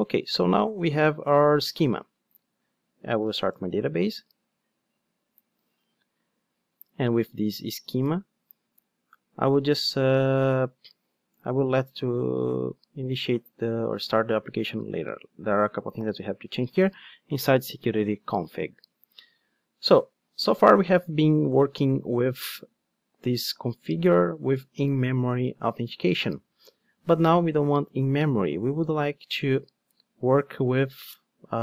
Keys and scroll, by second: 30.2 super+/.